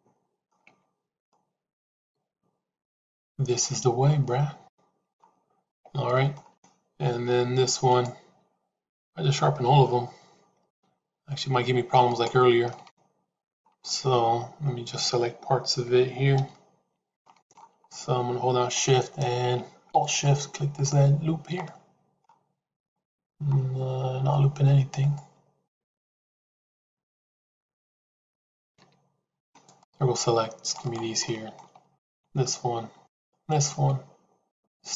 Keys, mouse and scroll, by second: 0.7 Tab, 1.2-5.0 middle drag, 5.6 Tab, 6.0 middle click, 10.6 a, 12.6 shift+middle click, 13.8 middle click, 16.2 KP_3, 17.2 shift+middle click, 20.0 alt+click, 21.5 middle click, 29.3 c, 31.1 middle click, 31.9 shift+click.